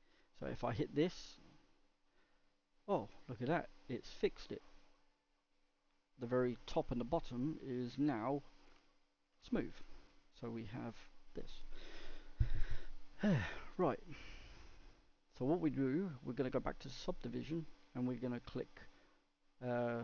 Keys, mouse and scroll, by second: 1.6-2.4 drag, 2.4-5.4 middle drag, 6.9-7.4 scroll down 1, 7.4-20.0 middle drag.